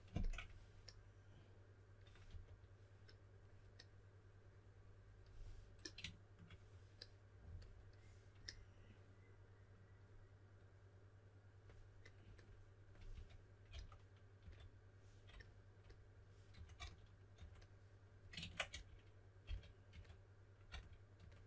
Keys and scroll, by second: 2.2 typing, 13.1-14.4 typing, 16.2-17.3 typing, 18.4 super+z, 18.6-21.1 typing.